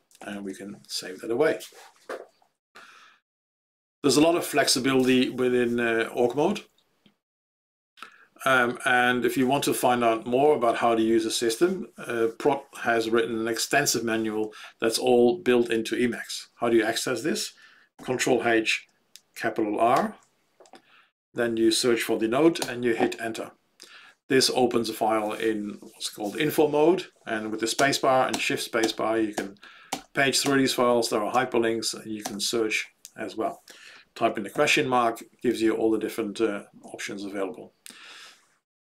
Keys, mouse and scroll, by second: 0.2 ctrl+s, 20.0 ctrl+r, 27.7-32.1 typing, 37.0 q.